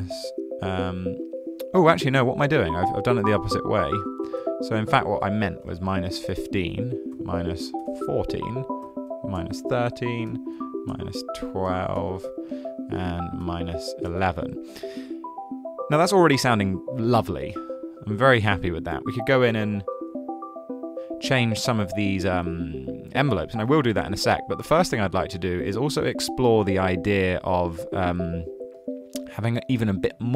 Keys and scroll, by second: 3.6 super+z, 5.3-11.9 typing, 13.4-14.2 typing, 20.9 super+z.